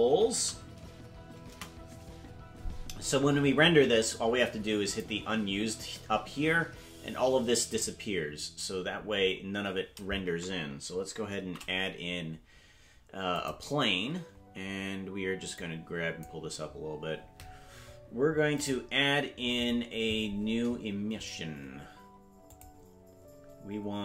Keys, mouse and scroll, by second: 5.1 click, 8.5 click, 9.1 scroll down 4, 11.4 shift+a, 15.5 click, 18.6 click, 22.5 click.